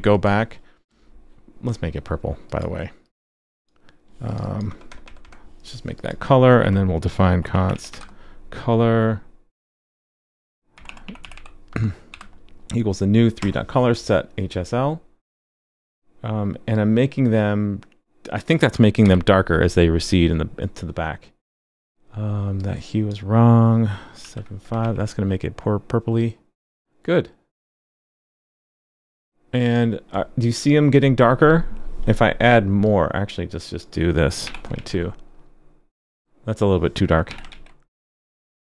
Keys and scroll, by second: 19.0 super+s, 24.8 super+s, 34.7 super+s, 37.5 super+s.